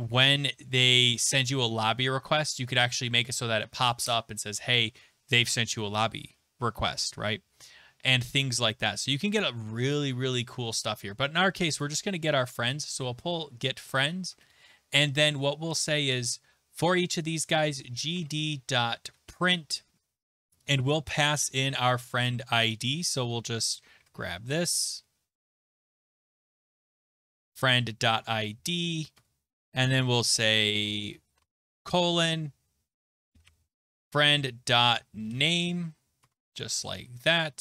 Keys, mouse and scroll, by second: 8.6-10.6 scroll, 11.8 click, 12.8-14.3 typing, 13.7 Right, 14.4 Return, 16.8-22.6 typing, 23.7-29.6 typing, 31.3-35.8 typing, 36.2 Tab, 36.8-37.6 typing.